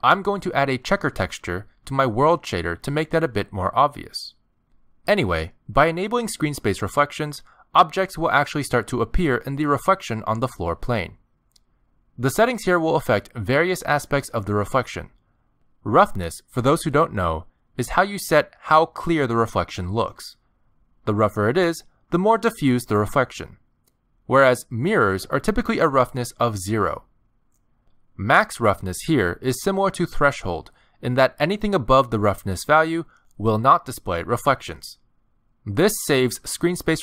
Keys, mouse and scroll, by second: 0.0-0.3 scroll up 1, 1.5 click, 3.2 click, 5.1 scroll up 3, 5.5 middle click, 6.8 scroll down 3, 7.0 middle click, 8.0 scroll up 2, 8.3 middle click, 9.1 click, 10.0 click, 11.6 middle click, 12.7 shift+middle click, 13.9-14.3 scroll up 3, 14.3 shift+middle click, 14.7 scroll down 1, 30.5 click, 35.4 click.